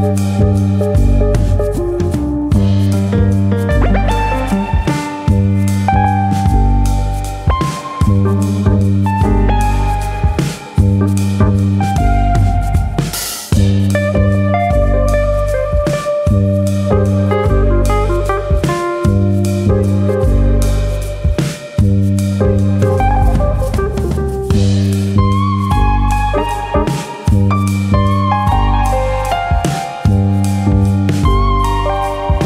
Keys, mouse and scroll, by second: 0.3 scroll up 2, 1.0 scroll up 1, 1.2 click, 2.0 middle click, 2.6 click, 3.1 middle click, 3.4 middle click, 4.0 click, 4.4 click, 5.2 KP_3, 5.9-6.3 scroll down 1, 6.3 KP_1, 6.9 scroll up 2, 7.3-7.6 scroll down 2, 9.3 g, 10.6 click, 11.7 click, 12.7 middle click, 14.1 middle click, 15.1 click, 15.5 ctrl+Tab, 17.1 shift+click, 17.6-18.1 scroll up 3, 17.9 ctrl+z, 18.1 middle click, 19.0 middle click, 20.0 click, 20.8 click, 21.5 click, 22.2 middle click, 22.5 middle click, 23.1 click, 23.5 middle click, 23.9 middle click, 24.5 middle click, 24.5 click, 24.8 middle click, 25.3 click, 25.8 middle click, 26.1-26.6 scroll down 1, 26.6 scroll down 1, 26.6 KP_1, 27.7 scroll down 1, 28.2-28.6 scroll down 1, 29.7 f, 31.0 click, 31.5 click.